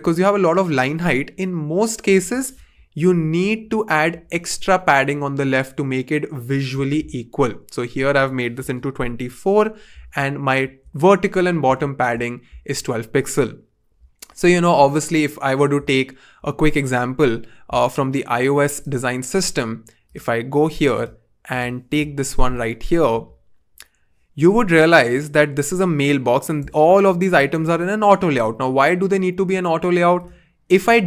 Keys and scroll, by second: 3.2-4.5 typing, 8.6-9.2 typing.